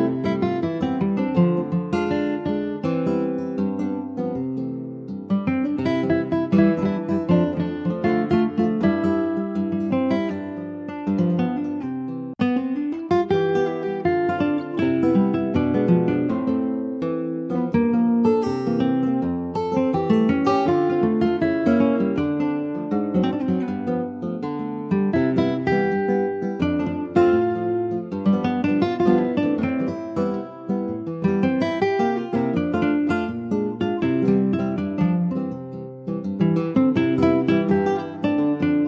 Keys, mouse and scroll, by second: 0.4 click, 2.3 middle click, 2.7-3.3 scroll up 1, 3.3 middle click, 4.3 click, 4.8 middle click, 4.9-5.3 scroll up 2, 5.3 click, 5.7 middle click, 5.9 scroll up 1, 6.3 click, 7.1 /, 7.8 middle click, 8.0-9.2 scroll up 1, 9.4 ctrl+s, 9.5 ctrl+click, 10.4 click, 10.8 ctrl+s, 11.3 /, 11.7 click, 12.0 middle click, 12.4-13.3 scroll down 2, 13.3 ctrl+s, 13.4 click, 13.7 scroll down 1, 13.9-15.6 middle drag, 15.6 ctrl+s, 15.9 click, 16.6 scroll up 2, 16.8-18.0 middle drag, 18.0 ctrl+s, 19.6 click, 20.3 ctrl+s, 20.4 click, 21.1 alt+middle click, 21.7 Tab, 22.0 click, 22.3-23.5 middle drag, 23.5 ctrl+s, 24.1-25.3 middle drag, 25.3 scroll up 1, 25.5 middle click, 26.1 ctrl+s, 26.3-27.6 shift+middle drag, 27.6 shift+s, 28.4 shift+a, 29.8 alt+middle click, 30.4 ctrl+s, 30.8 click, 31.8 s, 33.9 click, 35.1 alt+middle click, 35.4-35.8 scroll up 2, 36.1 alt+z, 36.5 shift+middle click, 36.7-37.3 scroll up 4, 37.3 s.